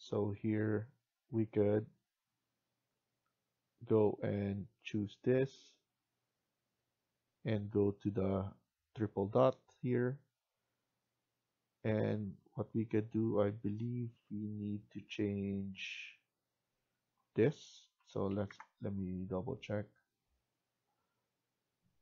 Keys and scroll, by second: 17.6-18.8 typing.